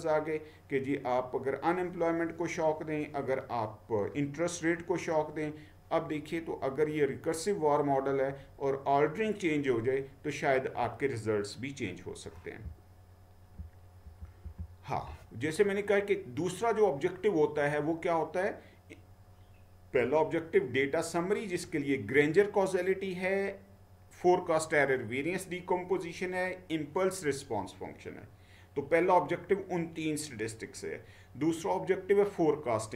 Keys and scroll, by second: 12.7-13.5 Down, 14.2 Down, 14.5 Down.